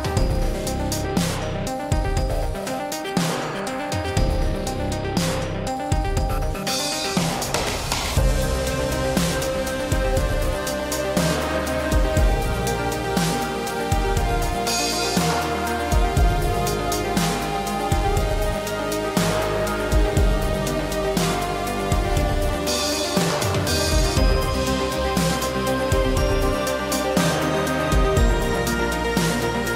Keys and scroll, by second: 10.3 ctrl+z.